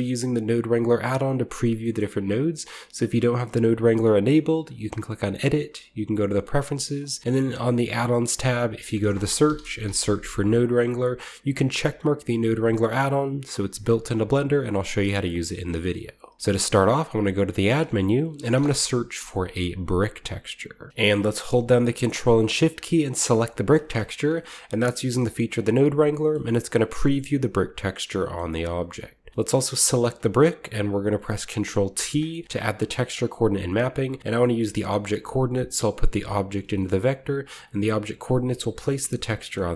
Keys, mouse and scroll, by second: 0.6-2.0 drag, 4.9 click, 6.0 click, 6.9 click, 7.9 click, 8.7 click, 9.4-9.9 typing, 10.5 click, 15.1 click, 15.5 scroll down 1, 15.6 middle click, 15.9 a, 16.3 shift+middle click, 16.9 typing, 17.6 shift+click, 18.3 typing, 19.9-20.9 drag, 20.9-23.4 middle drag, 20.9-22.1 scroll down 1, 23.4-24.7 ctrl+shift+drag, 24.2-24.9 shift+middle drag, 25.9-26.4 shift+drag, 26.3-27.8 shift+scroll up 2, 26.8 click, 27.8 scroll up 1, 28.6 click, 29.3 click, 29.9 ctrl+click, 31.9 ctrl+t, 32.4-34.1 middle drag, 32.6 a, 33.0-34.7 drag, 34.8-39.7 drag, 36.6-37.5 shift+middle drag.